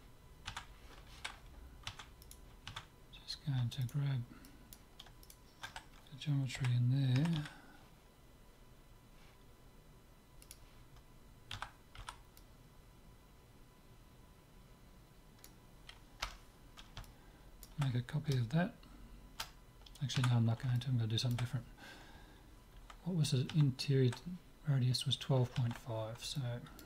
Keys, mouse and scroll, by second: 0.6 Tab, 1.9 Tab, 2.3-7.1 right drag, 2.7 Tab, 4.4-6.4 drag, 6.7 KP_7, 7.3 KP_Decimal, 7.5 z, 8.2-10.2 middle drag, 10.4-12.4 drag, 11.5 a, 12.2 c, 16.7-19.1 middle drag, 20.2 Tab, 20.7-22.5 middle drag, 26.4-26.8 middle drag.